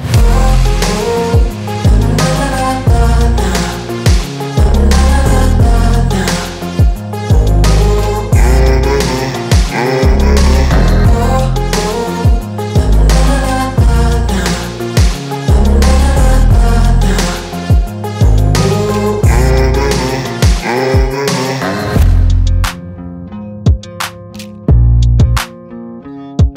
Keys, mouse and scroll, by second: 0.7 space, 1.9 click, 5.0-6.3 drag, 20.5 click, 23.7 ctrl+i, 26.1 click.